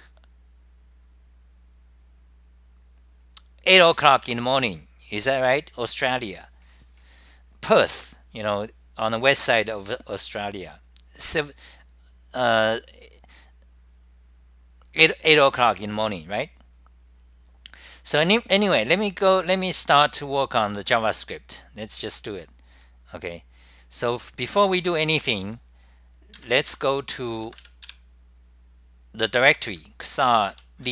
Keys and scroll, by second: 26.5-27.3 typing, 28.5-29.3 typing.